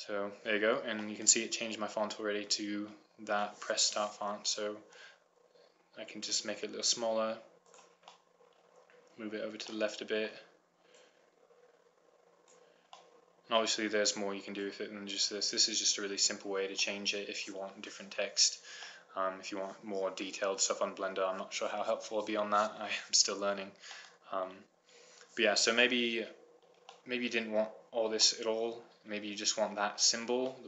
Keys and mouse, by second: 1.5-2.8 middle drag, 5.3 s, 8.4 click, 12.0 click, 15.3-16.6 drag, 16.6 middle click, 16.7 click, 16.8-18.3 middle drag, 18.5-20.8 middle drag, 24.3-26.9 middle drag, 27.9-30.5 middle drag.